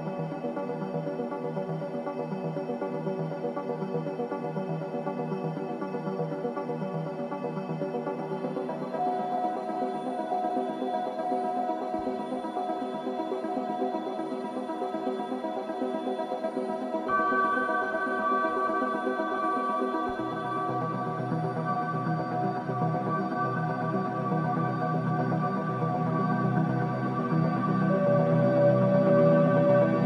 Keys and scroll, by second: 3.6 ctrl+3, 5.9 ctrl+alt+KP_3, 19.3 ctrl+shift+], 26.6 ctrl+shift+[, 26.8 ], 27.1 ], 27.4 ], 27.8 ].